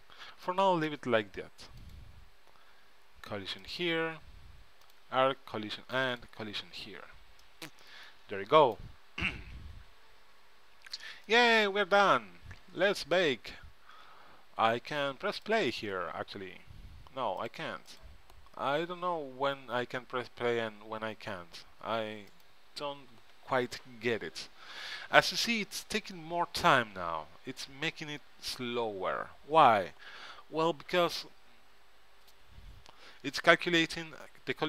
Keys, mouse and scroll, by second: 0.7-2.4 middle drag, 2.4-7.8 drag, 7.5-9.3 middle drag, 7.5 right click, 11.4-13.1 drag, 13.1-15.6 middle drag, 15.6-17.3 drag, 17.5-19.7 drag, 22.4-34.6 drag.